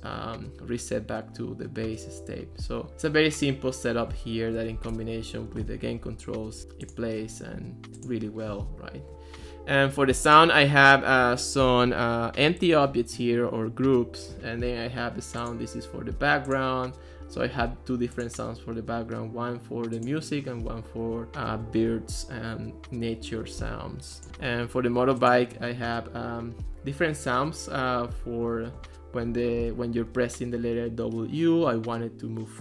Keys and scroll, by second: 5.0 Escape.